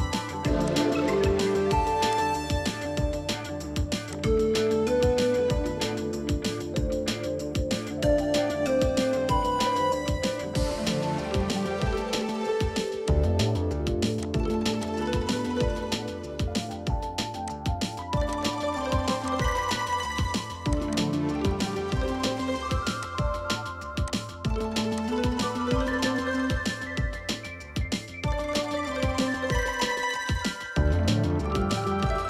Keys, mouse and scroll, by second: 6.6-6.9 scroll down 1, 6.9 middle click, 8.1 scroll up 1, 8.3 scroll down 1, 8.6-9.1 scroll up 1, 9.1 scroll down 1, 9.3 middle click, 10.4-11.0 scroll down 1, 11.0-11.5 scroll up 1, 11.5 scroll down 1, 11.6 middle click, 15.2 middle click, 16.0 scroll down 1, 16.3 middle click, 16.5 scroll up 1, 21.0 double click, 22.3-22.8 typing, 25.7 middle click, 29.0-31.0 scroll down 1, 31.1-31.8 scroll down 1.